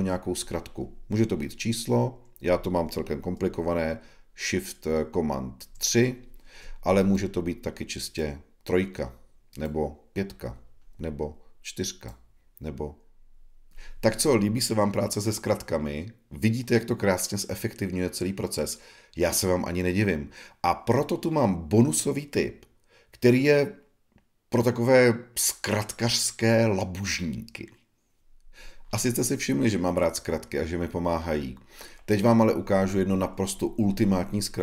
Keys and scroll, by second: 5.6 shift+super+3.